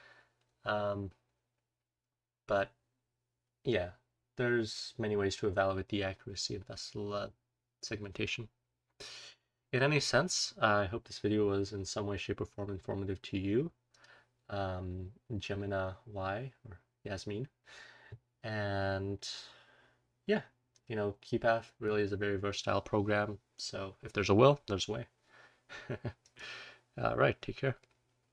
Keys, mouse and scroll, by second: 6.2-12.4 scroll down 2.